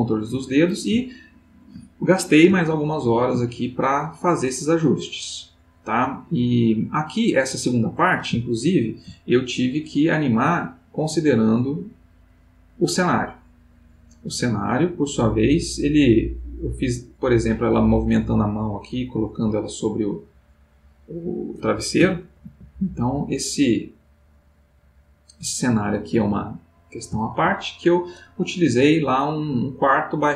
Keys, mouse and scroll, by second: 1.1-1.6 ctrl+middle drag, 2.1-2.6 ctrl+middle drag, 2.6 ctrl+middle click, 3.5 ctrl+middle click, 4.4-7.7 drag, 10.4 middle click, 12.1 click, 14.6-20.1 drag, 22.3 ctrl+s, 26.3 alt+Tab, 27.1 alt+Tab.